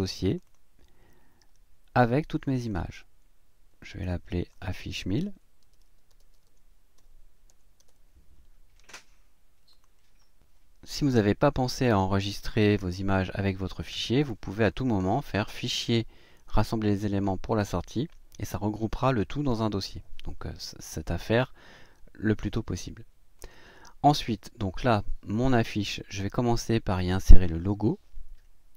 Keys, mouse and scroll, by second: 0.3 click, 2.4 click, 3.8 click, 5.2-8.4 typing, 9.7 click, 14.8 click, 23.4 click.